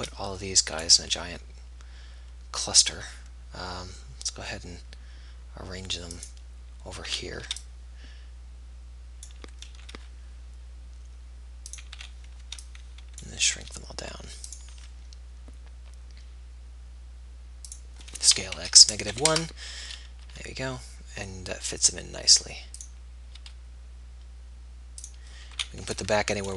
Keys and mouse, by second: 1.6 b, 1.6 g, 7.3 a, 10.4 b, 10.4 g, 12.2 a, 13.9 b, 13.9 s, 15.3 g, 18.8 s, 20.6 g, 23.6 g, 25.8 a.